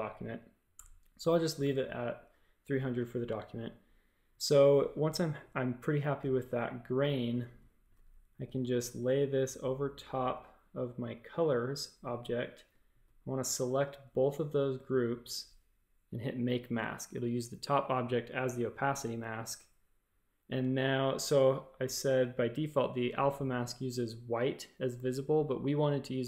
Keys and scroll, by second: 0.7 BackSpace, 8.4 space, 8.8 a, 12.1 space, 12.6 space, 12.8 v, 21.0-21.8 typing.